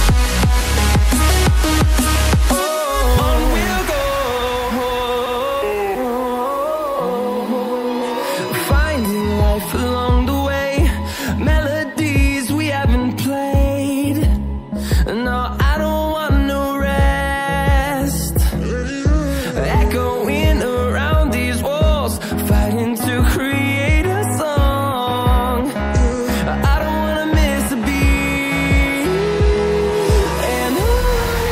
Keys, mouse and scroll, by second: 4.4 scroll down 1, 4.7 scroll up 1, 5.7 scroll down 1, 6.0 scroll up 1, 7.2 click, 13.1 ctrl+c, 13.3 ctrl+v, 14.1 click, 18.1 double click, 19.1 click, 22.1 double click, 22.9 click, 23.2 double click, 23.8 scroll down 1, 24.4 scroll up 1, 24.7 scroll down 1, 25.2 scroll up 1, 25.7 click, 26.2 ctrl+c, 26.4 ctrl+v, 27.2 click.